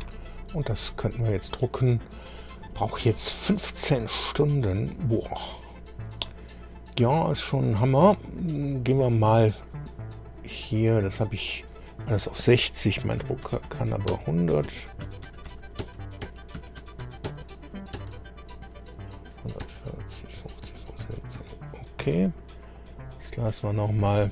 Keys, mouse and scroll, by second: 6.4-6.9 scroll up 1, 8.2-8.6 scroll down 1, 8.9-9.2 scroll down 1, 9.6-10.0 scroll down 1, 10.7-11.0 scroll down 1, 11.6 click, 13.2 KP_1, 13.4 KP_0, 13.6 KP_0, 14.1 Tab, 14.6 Tab, 15.0 KP_1, 15.2 KP_0, 15.8 Tab, 16.6 KP_1, 16.8 KP_0, 17.3 Tab, 18.0 Tab, 19.6 Tab, 20.4 Tab, 20.6 Tab, 21.0 Tab, 21.4 Tab, 23.1 click.